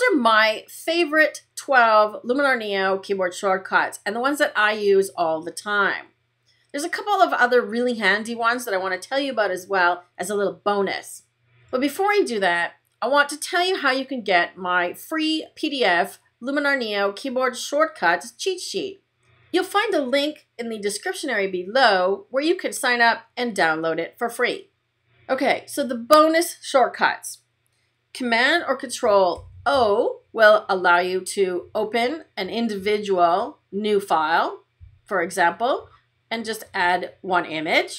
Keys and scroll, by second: 29.2 super+o.